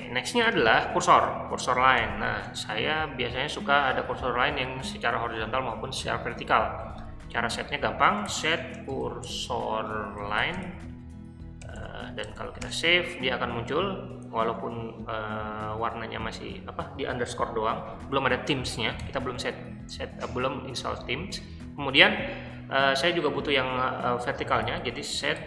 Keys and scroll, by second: 0.3 shift+g, 2.0-2.4 typing, 7.8-12.8 typing, 19.0 o, 24.2-25.4 typing.